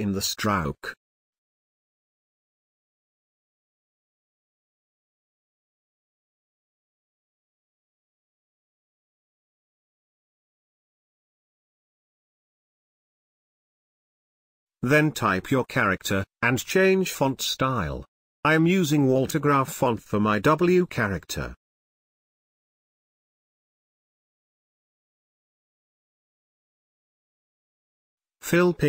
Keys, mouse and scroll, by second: 0.7 shift+click, 2.7 click, 7.8 space, 7.9-9.3 ctrl+drag, 11.8 t, 12.8 click, 14.8 shift+w, 16.4 click, 17.7-19.2 alt+shift+drag, 19.2-20.9 drag, 21.7-22.9 typing, 24.7 click, 27.9 click.